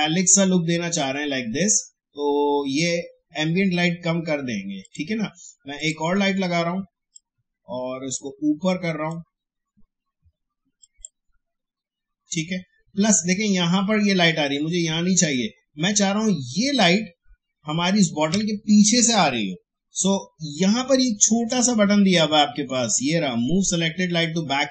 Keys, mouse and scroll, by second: 4.8-10.8 drag, 22.2 shift+Caps_Lock, 22.6 shift+scroll up 1.